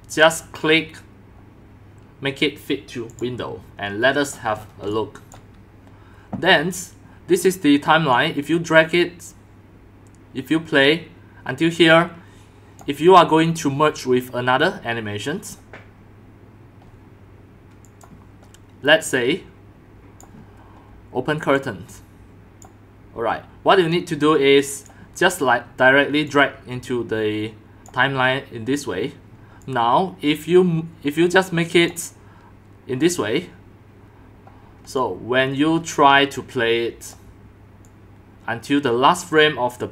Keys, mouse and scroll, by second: 0.2 click, 3.1 click, 4.3-4.8 scroll, 4.9 x, 5.5 drag, 7.1 click, 8.1-9.9 drag, 11.1-12.6 drag, 12.8 drag, 13.1-13.6 scroll, 17.8 click, 19.4 click, 19.9 click, 20.1 click, 21.5-22.6 drag, 24.7 click, 26.3 click, 29.6-30.9 drag, 31.1 click, 33.0-33.3 drag, 33.4 click, 35.0-37.1 drag, 37.8 click, 38.3-39.9 drag.